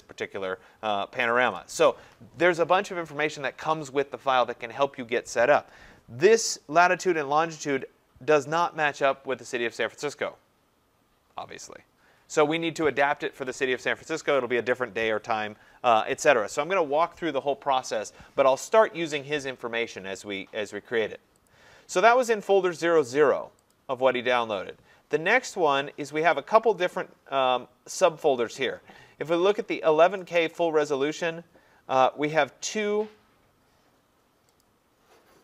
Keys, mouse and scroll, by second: 8.8 click, 18.8 click, 21.5 click, 23.7 click, 30.3 click, 30.5 click, 34.6 click.